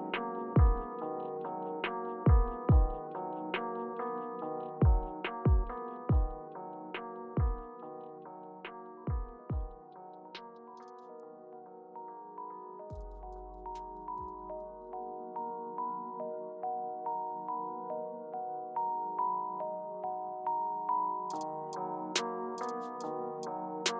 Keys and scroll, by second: 2.0 Right, 2.3 Left, 3.4 Return, 6.8 Left, 8.7 Return, 11.0 Down, 11.3 Down, 11.4 Down, 11.8 Right, 15.1 Right, 16.1 Right, 19.1 Return, 20.0 Return, 21.1 Right, 21.5 Tab, 22.4 Return.